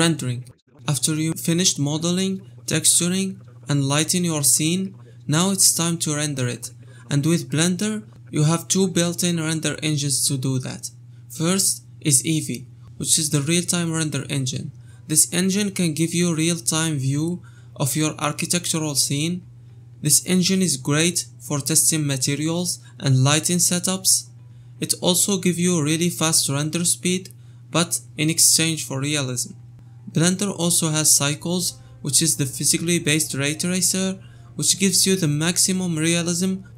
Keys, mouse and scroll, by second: 1.2-2.2 drag, 3.9-7.8 drag, 7.8 KP_0.